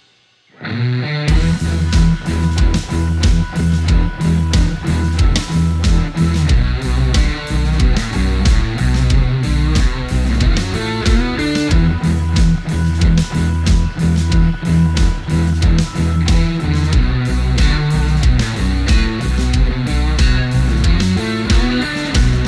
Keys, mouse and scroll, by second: 7.2 space, 20.3-20.7 scroll down 1, 21.0-21.4 alt+scroll up 1.